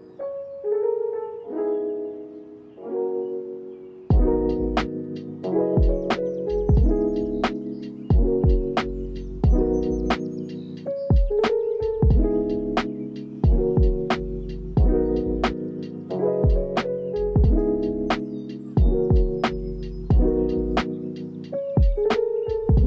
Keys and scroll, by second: 1.0 u, 8.5 space, 13.5 space, 16.9 space, 18.7 space, 20.1 Home, 20.4 space.